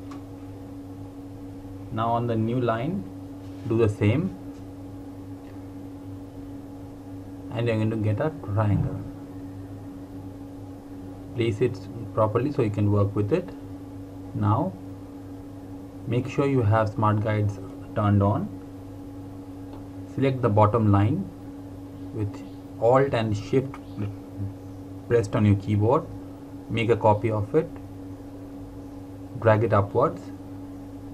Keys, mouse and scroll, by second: 3.3 click, 5.4 alt+Num_Lock, 5.6 alt+click, 10.2 click, 18.1 click, 23.3 click.